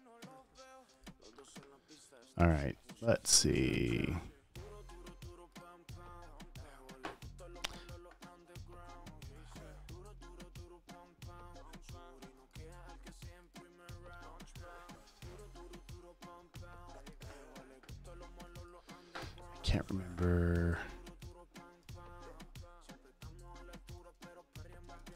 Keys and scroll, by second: 0.7 super+d, 22.4 super+n, 23.7-25.1 typing.